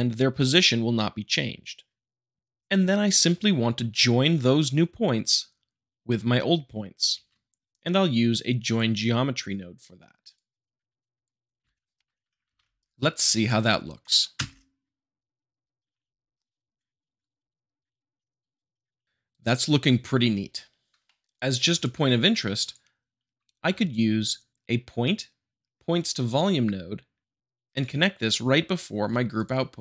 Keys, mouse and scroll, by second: 7.1 shift+a, 8.6-9.7 drag, 10.2-10.8 drag, 10.8 middle click, 11.0 click, 11.4 middle click, 12.1 shift+middle click, 12.5 ctrl+s, 14.3 space, 19.0 space, 20.6-20.9 middle drag, 21.0 shift+middle click, 21.2-21.6 drag, 22.6-23.4 drag, 25.9-27.0 drag, 29.3-29.8 drag.